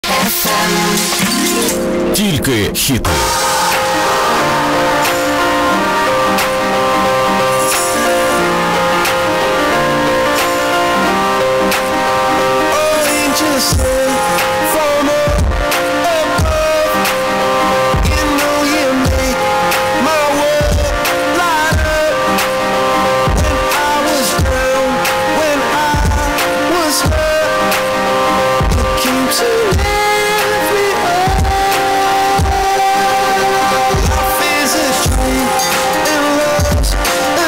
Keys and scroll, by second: 0.1 ctrl+q, 1.8 s, 1.9 Down, 2.5-4.1 Down, 4.3 Down, 4.7 Down, 4.9 Down, 4.9 Return.